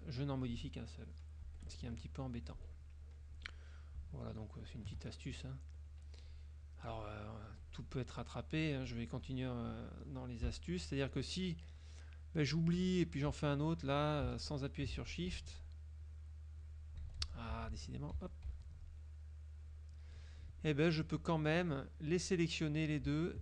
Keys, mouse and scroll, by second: 1.5 F1, 1.7 KP_Subtract, 2.4 F2, 2.9 click, 3.4 F1, 3.7 click, 4.3 shift+click, 4.7 shift+click, 6.1 F2, 6.3 click, 7.0 click, 7.5 F1, 7.8-8.4 drag, 8.2 right click, 9.0 click, 9.4 click, 10.6 Delete, 12.6 click, 13.8 shift+click, 15.1 ctrl+z, 16.1 click, 16.7 click, 17.3 ctrl+z, 19.1 ctrl+click, 19.7 ctrl+click, 20.9 click, 21.8-22.5 drag.